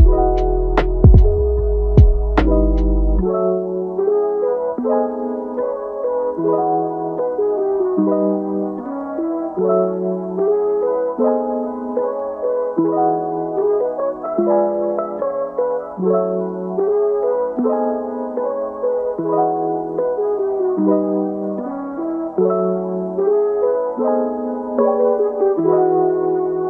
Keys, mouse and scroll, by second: 0.4-0.7 scroll up 1, 0.7 shift+middle click, 1.2-1.8 scroll up 1, 1.8-5.5 drag, 5.5 scroll down 1, 5.8 middle click, 6.3-6.8 scroll up 1, 6.8 click, 7.5 scroll down 3, 7.7-8.8 middle drag, 8.8-9.5 scroll up 5, 9.5 shift+middle click, 10.0-10.4 scroll up 1, 10.4-12.1 drag, 12.1 scroll down 3, 12.3 middle click, 13.0-14.1 drag, 14.1 ctrl+z, 14.6-15.7 drag, 15.7-18.1 middle drag, 18.1-22.1 drag, 22.1 scroll down 1, 22.3 middle click, 22.9 scroll down 1, 23.2-24.3 middle drag, 24.3 ctrl+z, 24.6 ctrl+z, 24.9 ctrl+z, 25.2-25.8 scroll down 7, 25.8 middle click, 26.2-26.6 scroll up 2.